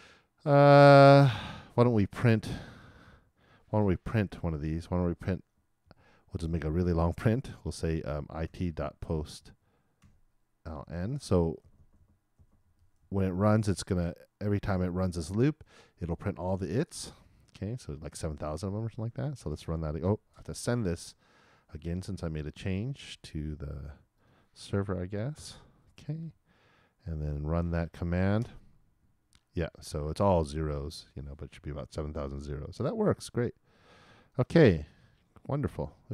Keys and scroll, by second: 25.3 shift+super+Return, 28.4 super+Return.